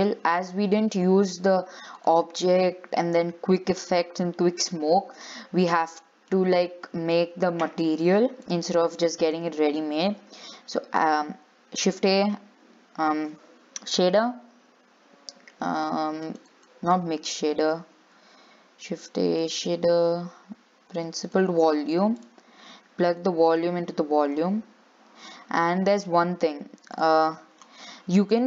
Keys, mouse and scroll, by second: 0.0-5.2 drag, 5.2 scroll down 3, 5.4-6.7 middle drag, 6.7-7.1 scroll up 3, 7.1-8.7 middle drag, 8.7 click, 9.6 x, 24.6-27.4 drag, 27.4 x.